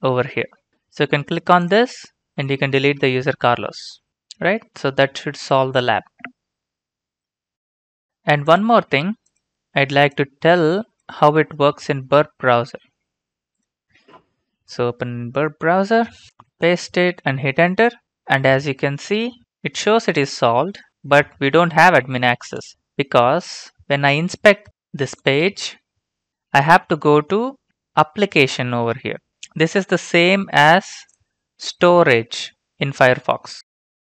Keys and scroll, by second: 11.4 ctrl+c, 16.3 ctrl+v, 16.7 Return, 33.6 alt+Tab.